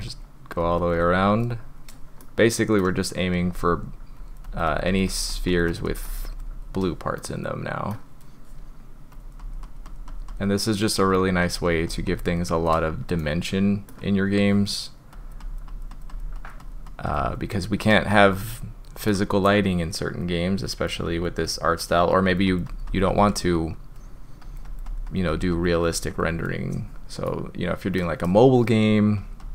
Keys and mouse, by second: 0.1 click, 0.3 click, 0.8 click, 2.2-2.8 middle drag, 4.2 click, 4.5 click, 4.7 click, 4.9 click, 5.1 click, 5.3 click, 5.5 click, 5.7 click, 5.9 click, 6.1 drag, 7.1-7.9 middle drag, 9.1 click, 9.4 click, 9.6 click, 9.9 click, 10.1 click, 10.3 click, 10.9 click, 11.2 click, 11.4 click, 11.6 click, 11.9 click, 13.2-13.9 middle drag, 15.1 click, 15.4 click, 15.7 click, 15.9 click, 16.1 click, 16.4 click, 16.6 click, 16.9 click, 17.1 click, 18.4 middle click, 20.4-20.9 drag, 21.1 drag, 21.4 click, 21.7 click, 22.0 click, 22.3 click, 22.5 click, 22.7 click, 22.9 click, 23.1 click, 23.3 drag, 24.4 click, 24.7 click, 24.9 click, 25.1 click, 25.3 click, 25.5 click, 25.8 click, 26.1 click, 27.2 click, 29.2 click, 29.4 click.